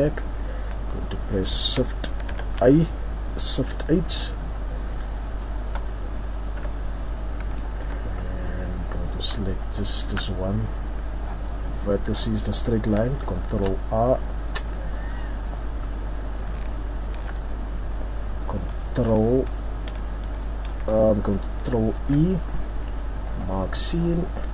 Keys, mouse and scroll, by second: 2.3 shift+h, 4.0 middle click, 4.5-5.5 scroll up 2, 5.5 Tab, 5.5 scroll up 1, 6.6 KP_3, 7.4-8.1 scroll down 4, 8.1-9.1 scroll up 4, 9.6 alt+right click, 11.7 scroll down 1, 13.5 ctrl+r, 14.7 right click, 15.8-16.3 scroll up 3, 17.1 ctrl+z, 22.0 ctrl+e, 23.8-24.1 scroll down 3, 24.1 middle click, 24.1-24.5 scroll up 4.